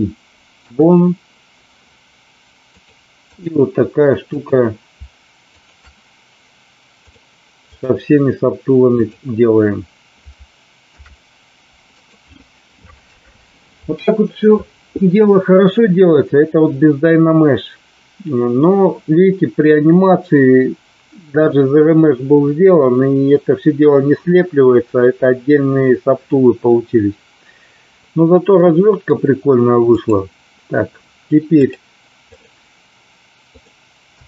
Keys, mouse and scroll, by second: 2.7 click, 4.3 click, 7.1 click, 10.8 ctrl+p, 28.6 middle click, 29.9 click, 31.5-32.4 drag, 33.5 click.